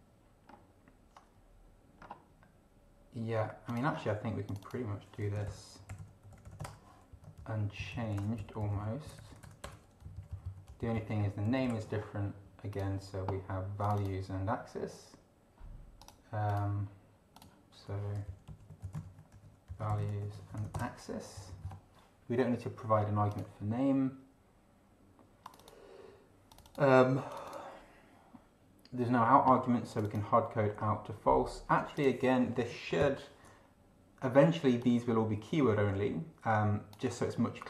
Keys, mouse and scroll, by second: 0.5 scroll down 1, 2.0 scroll down 1, 3.7 click, 3.9 scroll down 1, 4.5 click, 4.9-7.0 typing, 7.1 Down, 7.4 ctrl+Left, 8.1 ctrl+shift+BackSpace, 8.4 ctrl+shift+End, 8.6 ctrl+shift+Left, 9.1 ctrl+shift+BackSpace, 10.0 ctrl+shift+Down, 10.7 ctrl+shift+Up, 11.4 ctrl+shift+Right, 11.6 ctrl+shift+Left, 12.7 click, 13.8 click, 16.0 click, 16.5 click, 17.4 click, 18.3 ctrl+Left, 18.5 ctrl+Right, 18.8 ctrl+Left, 19.0 ctrl+shift+Right, 19.3 ctrl+shift+v, 19.7 ctrl+shift+Down, 19.9 ctrl+shift+Left, 20.0 ctrl+shift+Right, 20.3 ctrl+shift+a, 20.5 ctrl+shift+x, 20.6 ctrl+shift+i, 20.7 ctrl+shift+space, 20.8 ctrl+shift+BackSpace, 21.1 ctrl+shift+End, 21.3 ctrl+shift+Down, 23.3 click, 25.4 click, 26.5 click, 27.3 click, 29.9 click, 31.9 click, 33.0 ctrl+alt+b, 34.8-37.1 drag.